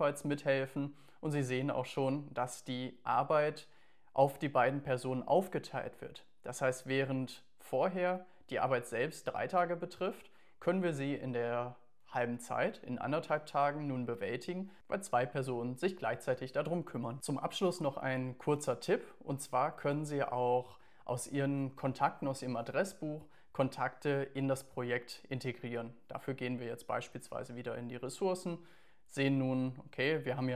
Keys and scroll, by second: 8.5 Down, 9.5 Down.